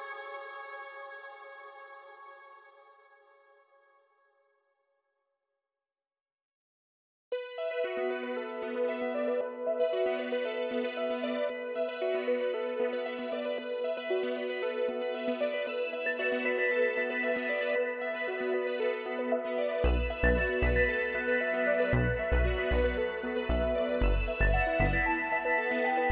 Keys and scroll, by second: 2.1 ctrl+-, 2.6 ctrl+=, 16.5 shift+Down, 22.2 shift+Down, 22.4 ctrl+z.